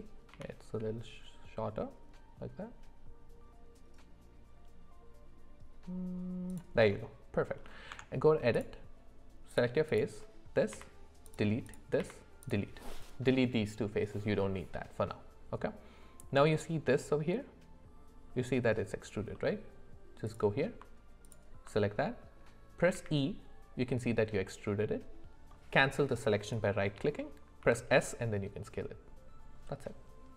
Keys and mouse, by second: 6.9 middle click, 7.9 Tab, 9.5 click, 10.7 x, 12.0 x, 19.3 middle click, 20.3 click, 21.2 alt+click, 22.9 e, 27.6 s.